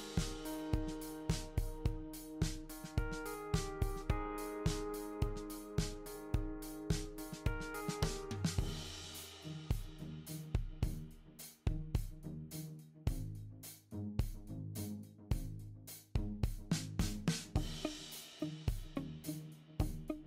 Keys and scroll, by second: 15.1 super+d.